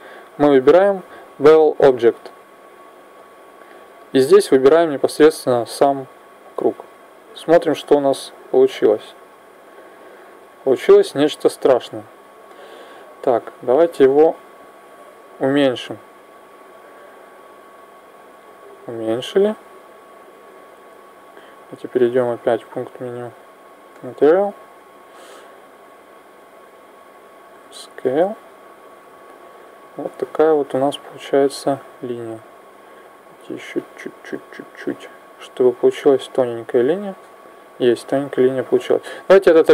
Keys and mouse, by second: 3.1-4.9 drag, 7.6-11.0 middle drag, 11.7 z, 11.9 middle click, 12.5-13.9 middle drag, 13.9 right click, 21.9-23.8 drag, 24.0-29.2 middle drag.